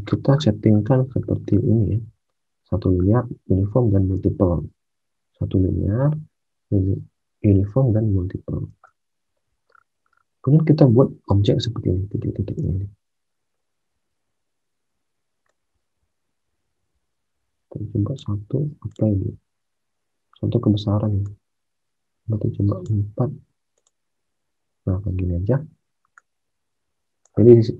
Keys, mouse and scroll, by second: 4.0 alt+Tab, 8.7 alt+Tab, 12.6 alt+Tab.